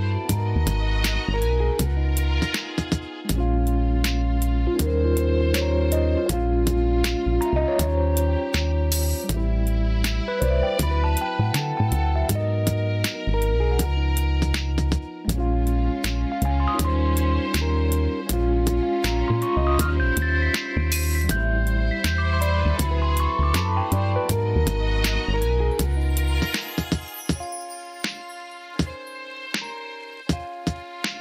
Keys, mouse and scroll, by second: 0.4 click, 1.0 Tab, 1.2 right click, 2.2 Tab, 4.3 alt+shift+click, 5.9 click, 6.4 click, 6.8 alt+shift+click, 7.2-8.6 drag, 8.6 Tab, 9.1 click, 9.5 KP_1, 10.5 shift+middle click, 12.2 r, 13.0 click, 15.5 click, 17.8 KP_3, 18.6 s, 19.5 click, 19.9 scroll up 1, 20.0 middle click, 20.5 s, 20.9-21.2 drag, 21.2-21.9 middle drag, 22.4-23.3 scroll up 1, 23.3-23.9 middle drag, 23.9-24.9 scroll down 1, 24.9 middle click, 25.8 click, 26.6 click, 27.5 ctrl+z, 28.0 shift+click, 29.6 click, 30.5 drag, 30.9-31.2 middle drag.